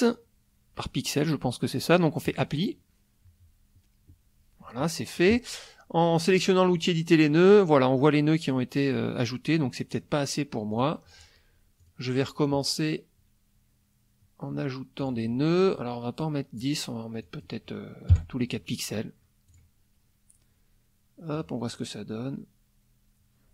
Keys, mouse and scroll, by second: 2.3 click, 5.2 click, 6.7 click, 10.7 click, 11.8 click, 15.0 click, 16.2-16.8 drag, 17.2 click, 18.1 KP_4, 19.5 click, 21.4 click.